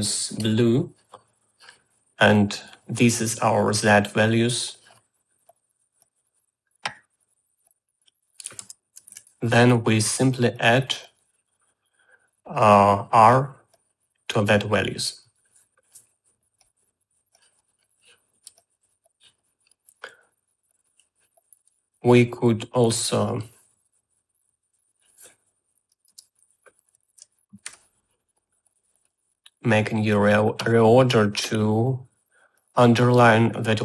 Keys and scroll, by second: 9.1-10.0 typing, 27.0 Tab, 27.5-28.5 typing.